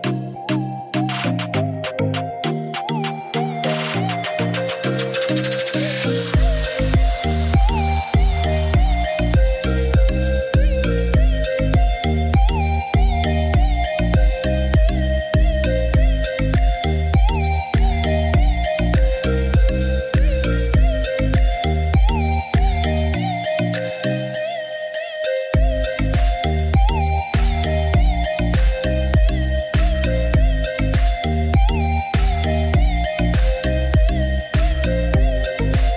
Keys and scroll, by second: 17.5 Escape, 35.4 1, 35.8 Return.